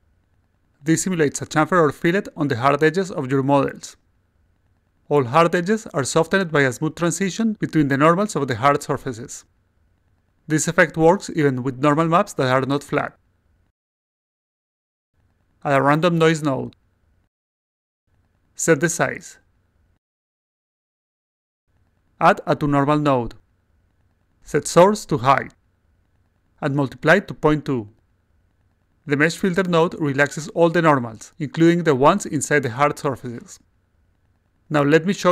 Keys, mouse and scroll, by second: 1.6-3.4 alt+right drag, 3.8 alt+click, 6.1-7.4 alt+middle drag, 10.7 click, 11.3 click, 12.1 click, 12.8 click, 13.2-13.7 alt+drag, 13.8-14.3 alt+middle drag, 15.1 click, 16.6-17.5 drag, 18.7 click, 19.3 ctrl+v, 19.8 click, 20.2 ctrl+v, 21.8 click, 23.3-24.1 drag, 24.7 click, 25.2 click, 26.0 click, 26.5 0, 27.0 2, 28.5 click, 29.5 click, 30.3-31.5 alt+drag, 32.1 click, 32.8 click, 33.5 click, 34.2 click, 35.0-35.3 alt+drag.